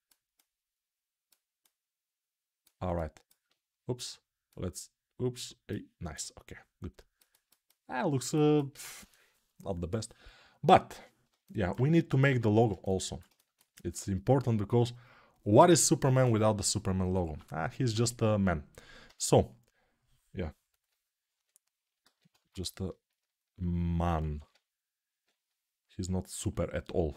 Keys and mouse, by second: 16.9-27.1 ctrl+drag, 17.1 ctrl+Tab, 17.8 alt+q, 25.2 [.